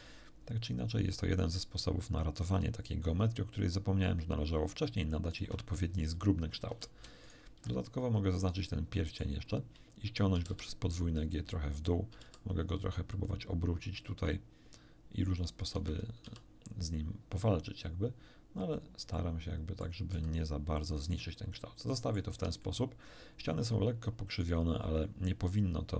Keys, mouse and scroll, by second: 0.8 click, 1.0 middle click, 1.2 click, 1.3 ctrl+middle click, 1.8-5.5 ctrl+drag, 6.6 a, 7.2 alt+shift+right click, 7.8-9.3 alt+shift+middle drag, 10.3 g, 10.4 g, 11.7 click, 12.2 r, 15.7 Escape, 16.2 r, 18.7 click, 19.1 middle click, 20.0 s, 20.7 click, 21.0-22.3 middle drag, 22.2 Tab, 22.6-25.9 middle drag.